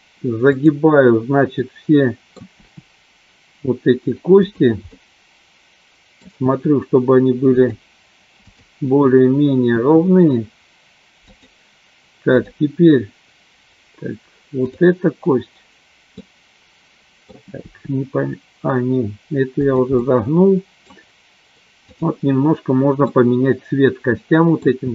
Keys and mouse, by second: 0.6 click, 1.6 middle click, 2.7 r, 4.9-6.1 middle drag, 6.1 click, 6.6 r, 9.9 r, 14.6 click, 16.1-17.2 middle drag, 17.8 r, 20.1 middle click, 21.8 click, 23.1-24.6 middle drag.